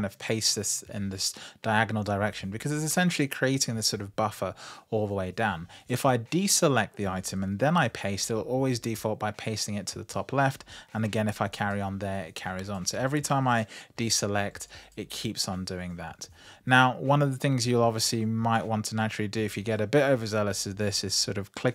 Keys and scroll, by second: 7.4 super+v, 10.8 super+v, 13.4 super+v.